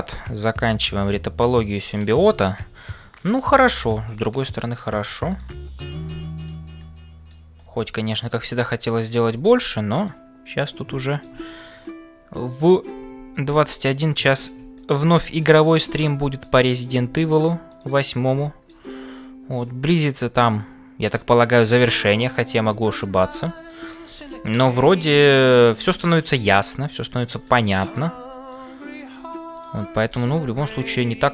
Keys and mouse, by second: 0.0-31.3 typing, 4.1 middle click, 6.8 middle click, 8.2 click, 8.6 middle click, 11.0 shift+middle click, 11.7 click, 14.3 middle click, 14.7 middle click, 16.2 middle click, 18.3 middle click, 19.5 click, 20.0-21.3 middle drag, 22.8 shift+middle click, 23.6 click, 25.3 middle click, 25.9 click, 27.4 middle click, 28.5 middle click, 29.6 click.